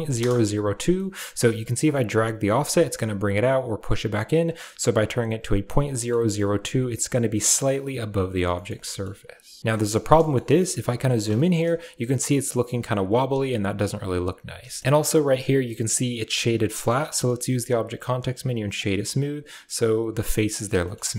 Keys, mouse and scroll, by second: 0.9 middle drag, 1.8-4.3 shift+drag, 6.1 shift+middle click, 7.8-8.3 middle drag, 8.4-9.0 shift+middle drag, 9.7 shift+middle click, 10.6-11.0 ctrl+middle drag, 11.3 shift+middle drag, 14.6 shift+middle click, 14.8 shift+middle click, 16.6 shift+middle drag, 20.7 shift+middle click, 21.0-21.1 middle drag.